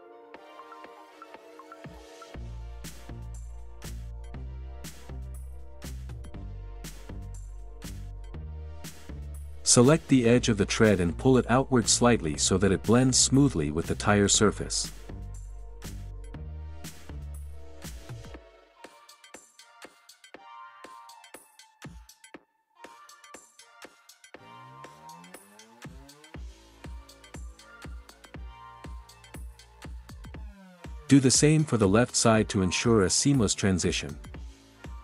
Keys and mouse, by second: 0.0-1.8 middle drag, 4.3 Tab, 5.7 KP_Decimal, 6.9 click, 8.7-9.2 middle drag, 9.3 middle click, 12.4 middle click, 12.8 ctrl+KP_3, 14.4 g, 15.8 y, 17.8 click, 18.3 ctrl+z, 18.5 ctrl+z, 19.0 click, 21.2 click, 22.0 ctrl+KP_3, 25.5 e, 26.4 x, 31.7 Tab, 32.5 click, 33.1-33.5 drag, 34.6 click.